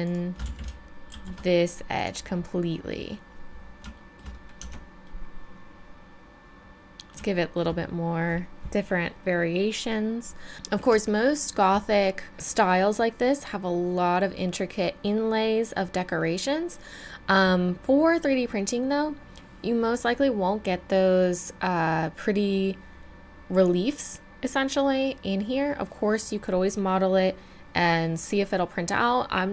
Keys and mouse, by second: 0.4 z, 1.1 shift+e, 4.6 Tab, 6.8 middle click, 12.3-29.5 middle drag.